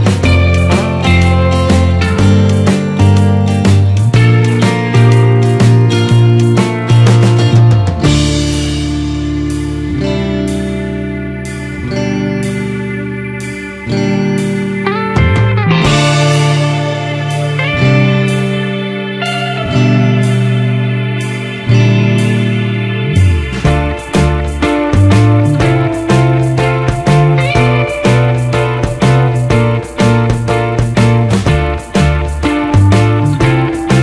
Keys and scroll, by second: 1.6 ctrl+a, 29.2 ctrl+t, 30.7 Return, 32.4 ctrl+j.